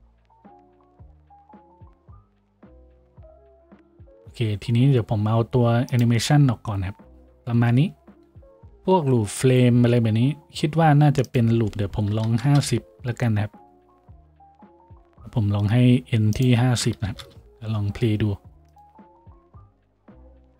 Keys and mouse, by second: 2.1 F6.